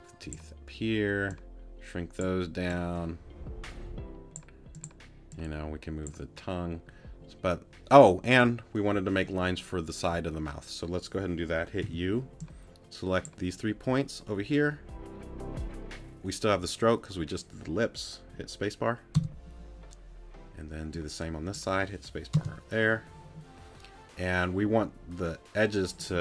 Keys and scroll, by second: 11.8 u, 19.1 space, 22.3 space.